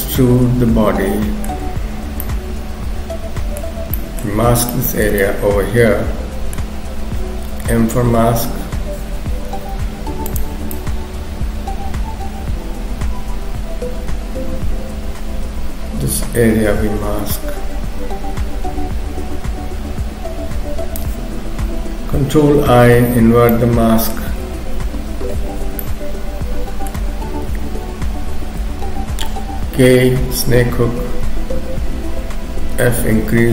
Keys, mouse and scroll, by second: 1.7-2.2 scroll up 2, 2.2 middle click, 4.0 middle click, 4.4-4.7 scroll up 2, 4.7 shift+middle click, 5.2 middle click, 7.9 m, 9.5 shift+f, 10.7 click, 22.7 ctrl+i, 23.5 middle click, 24.4 KP_3, 25.8 shift+middle click, 29.8 k, 32.7 f.